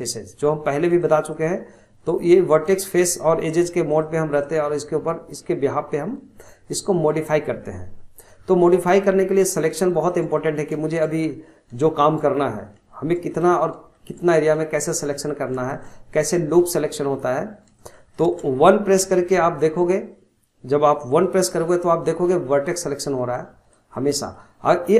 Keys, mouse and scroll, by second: 0.0 middle click, 0.9 click, 1.3 click, 2.1 click, 2.5 click, 3.9 click, 4.3 click, 7.4 scroll down 2, 8.4-9.1 scroll up 4, 9.1 shift+middle click, 9.5-9.9 scroll up 2, 9.9-11.2 shift+middle drag, 11.2-11.8 scroll down 2, 11.8 shift+middle click, 12.3-12.9 scroll down 1, 12.9 shift+middle click, 13.6 scroll up 1, 13.9 shift+middle click, 14.3-14.6 scroll up 1, 14.6 shift+middle click, 15.5 scroll up 1, 15.7-16.8 shift+middle drag, 16.8 scroll down 2, 17.0 middle click, 17.5 scroll up 1, 17.8-19.0 shift+middle drag, 19.0 1, 21.0-22.1 middle drag, 22.1 click, 22.9 scroll down 1, 23.2 middle click, 23.7 click, 24.2 middle click, 24.5 scroll up 1, 24.7 middle click.